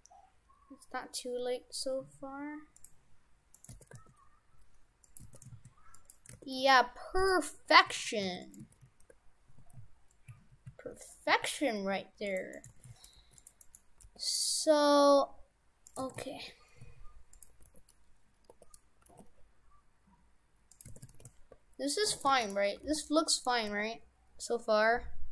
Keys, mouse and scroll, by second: 3.6 right click, 3.7 shift+f, 5.3 shift+f, 6.5 shift+f, 7.6 Tab, 7.9 shift+f, 8.7 shift+f, 12.6 right click, 12.7 shift+f, 13.7 right click, 14.0 g, 16.1 shift+f, 17.7 f, 18.5 f, 18.5 t, 19.1 g, 20.9 shift+f, 22.5 shift+d, 22.8 g, 23.7 g.